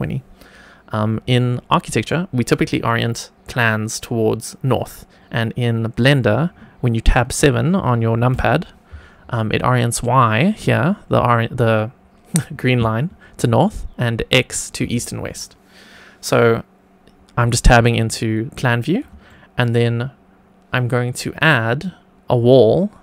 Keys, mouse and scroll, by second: 1.6 middle click, 8.2 KP_7, 19.2-19.6 shift+middle drag.